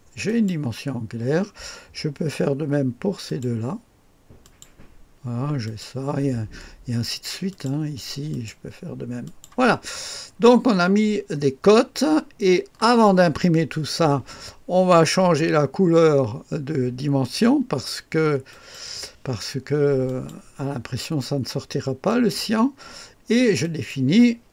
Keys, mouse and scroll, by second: 0.2 click, 3.2 click, 4.4 click, 5.6 click, 7.5 click, 8.3 click, 9.3 click, 10.3-11.2 scroll down 1, 11.3-13.6 middle drag, 18.5 click, 20.1 click, 22.1 click, 23.6 click.